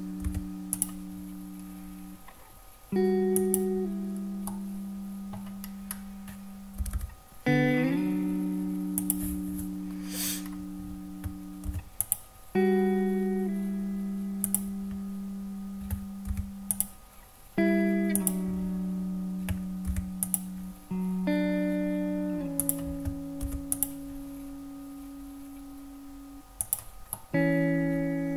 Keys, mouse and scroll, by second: 0.3 ctrl+r, 3.5 click, 4.6 middle click, 5.7-6.1 scroll up 2, 6.9 g, 7.0 g, 9.1 click, 10.5-11.2 scroll down 2, 11.8 ctrl+r, 14.6 click, 16.4 ctrl+r, 18.2 click, 20.0 ctrl+r, 22.7 click, 23.7 ctrl+r, 26.7 click, 27.2-28.3 middle drag.